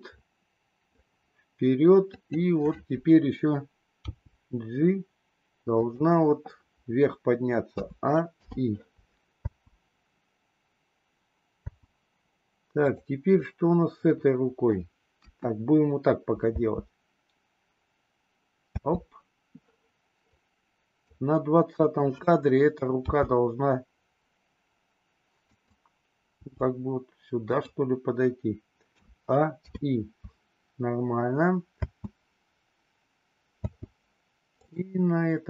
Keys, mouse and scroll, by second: 2.0 click, 3.9 g, 7.6 a, 8.4 i, 9.4 space, 11.7 space, 12.8 click, 13.4-14.8 middle drag, 15.1 KP_1, 16.4 space, 18.9 space, 20.3 click, 21.8 click, 22.9 g, 26.3 g, 28.9 a, 29.6 i, 31.7 space, 33.7 space, 34.5 click.